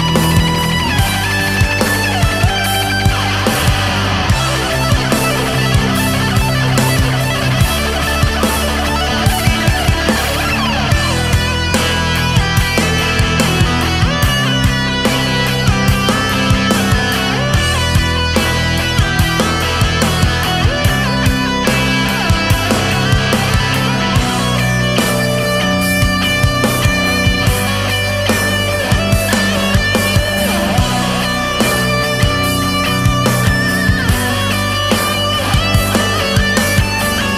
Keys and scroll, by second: 0.4 ctrl+z, 1.9 space, 3.0 scroll down 1, 3.4 ctrl+z, 4.8 space, 6.2 scroll down 1, 8.0 ctrl+z, 9.3 ctrl+z, 9.6 ctrl+z, 9.8 ctrl+z, 12.0 ctrl+z, 12.5 ctrl+z, 13.4 space, 14.3 ctrl+z, 15.6 space, 16.8 ctrl+z, 17.1 ctrl+z, 17.5 space, 17.7 ctrl+z, 17.8 space, 18.2 space, 19.5 ctrl+z, 20.5 ctrl+z, 20.7 ctrl+z, 20.9 ctrl+z, 21.4 space, 22.7 ctrl+z, 24.7 ctrl+z, 26.6 space, 26.7 ctrl+z, 27.4 space, 27.5 ctrl+z, 28.0 ctrl+z, 32.9 space, 34.9 ctrl+z.